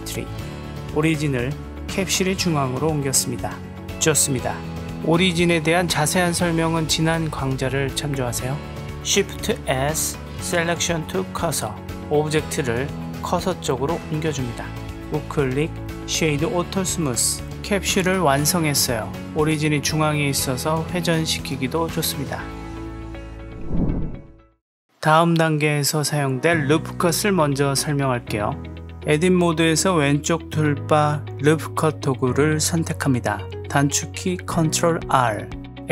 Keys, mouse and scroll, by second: 2.7 Tab, 3.2 click, 5.7 Tab, 6.0-6.3 drag, 6.3-7.4 middle drag, 9.9 shift+s, 14.0-14.8 drag, 14.8 w, 15.1-17.7 right drag, 18.2 click, 18.8-19.6 middle drag, 20.2-21.2 drag, 22.1-23.7 drag, 25.8 click, 29.4 Tab, 32.3-33.6 drag.